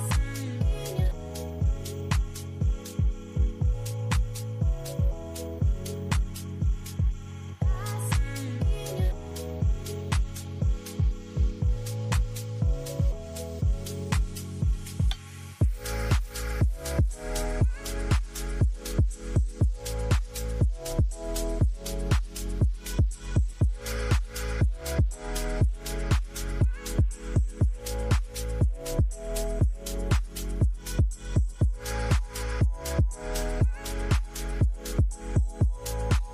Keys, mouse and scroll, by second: 0.0 double click, 3.9 double click, 9.4 ctrl+z, 10.4 ctrl+z, 11.3 ctrl+z, 14.9 F11, 27.3-28.4 typing, 30.4 typing.